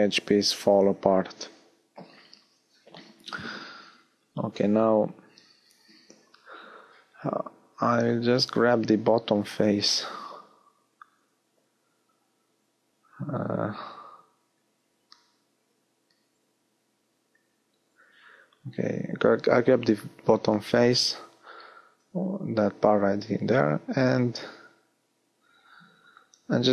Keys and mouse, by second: 5.9-6.9 middle drag, 14.4-15.8 middle drag.